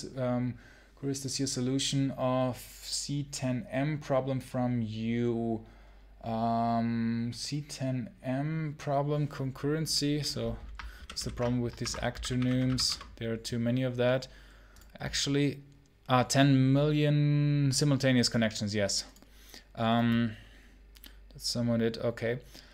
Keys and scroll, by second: 10.8 ctrl+super+h, 11.0 ctrl+super+h, 11.6 ctrl+t, 11.7-12.8 typing.